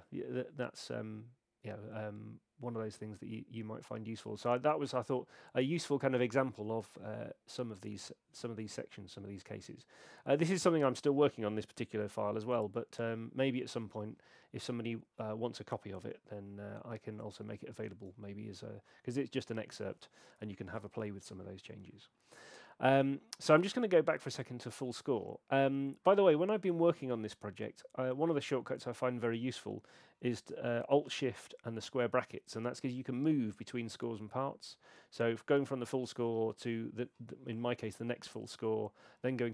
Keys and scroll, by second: 17.7 shift+super+c, 32.9 alt+shift+], 38.3 alt+shift+].